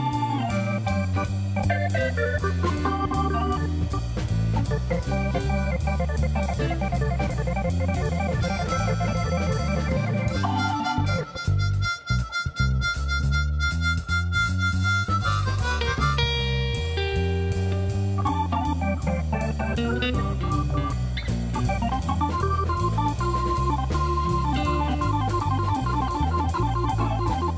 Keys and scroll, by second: 0.8 Tab, 1.5 shift+z, 3.0 Tab, 3.4 a, 4.5 s, 4.9 y, 10.5 Tab, 12.9 g, 13.1 y, 17.9 g, 18.1 y, 22.8 g, 23.2 z.